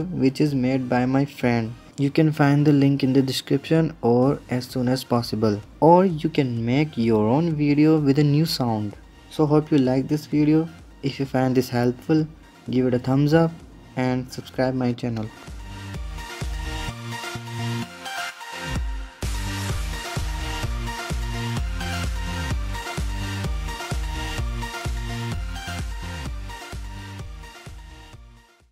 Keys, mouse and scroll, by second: 8.9-11.3 middle drag, 11.3-13.0 drag, 13.0-14.2 middle drag, 14.2-15.3 scroll up 1, 15.5-28.7 shift+middle drag.